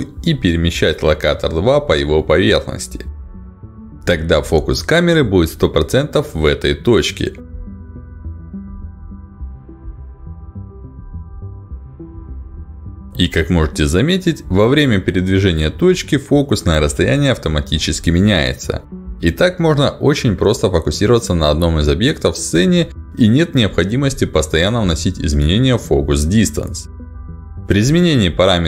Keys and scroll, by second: 22.1 ctrl+alt+d.